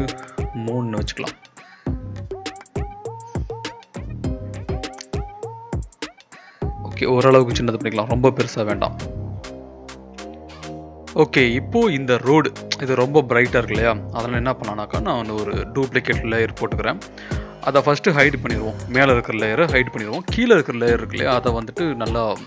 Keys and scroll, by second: 0.0-1.0 typing, 3.0 ctrl+t, 10.1 ctrl+z, 20.9 ctrl+l.